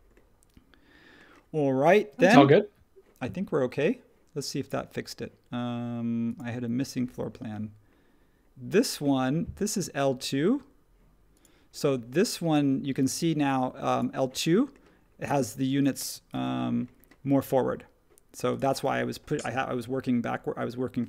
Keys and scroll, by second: 1.9 space, 16.3 super+1.